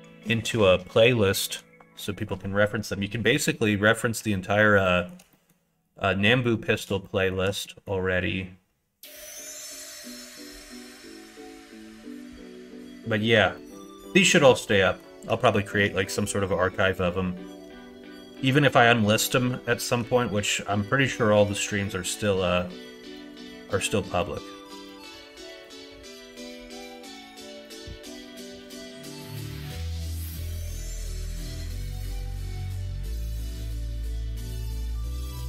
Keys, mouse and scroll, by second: 4.9 shift+middle click, 5.4 middle click, 6.5 middle click, 7.0 shift+middle click, 7.7 middle click, 9.3 3, 9.9 click, 10.3 middle click, 11.0 middle click, 13.0 ctrl+click, 13.7 middle click, 14.9 middle click, 15.6 shift+middle click, 16.2 middle click, 22.5 middle click, 23.2 middle click, 24.3 middle click, 25.7 middle click, 27.7 middle click, 28.6 shift+click, 30.9 middle click, 31.9 KP_1, 32.4 KP_3.